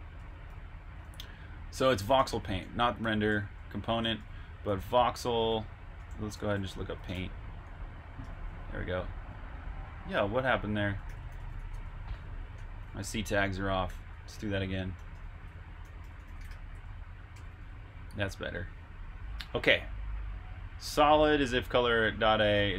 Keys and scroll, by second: 0.1 Escape, 0.9 typing, 2.0-2.7 typing, 3.3 super+j, 4.4-7.1 typing, 8.8 typing, 10.5-12.0 typing, 13.9 super+h, 13.9 typing, 14.9-18.5 typing.